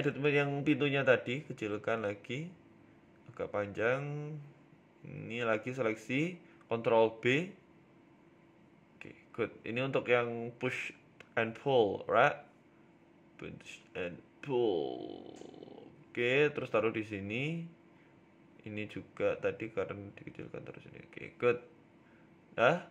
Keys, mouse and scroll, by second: 0.4 g, 1.4 s, 2.4 s, 3.5-4.4 scroll up 5, 3.7 shift+middle click, 4.2 s, 5.4 Tab, 5.8 Tab, 6.0 click, 6.4 shift+click, 8.1 ctrl+b, 10.4 middle click, 10.7-11.9 scroll down 3, 11.9 scroll down 1, 11.9 a, 12.0 a, 12.2 l, 12.8 s, 13.9 KP_3, 14.4 s, 17.7 g, 19.9 Tab, 20.2 right click, 20.7 g, 22.5 middle click, 22.7-22.9 scroll down 7.